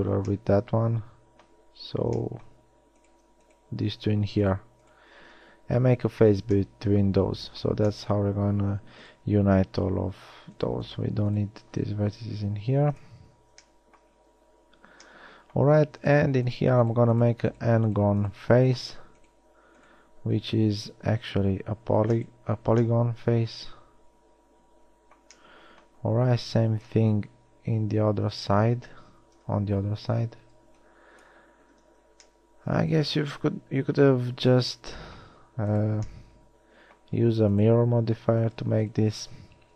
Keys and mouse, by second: 0.5-2.3 middle drag, 6.0 f, 12.5 x, 21.5 f, 23.3 middle click, 27.0 KP_3, 27.8 KP_1, 29.5 z, 30.1 a, 30.9 b, 32.1 z, 35.9 middle click.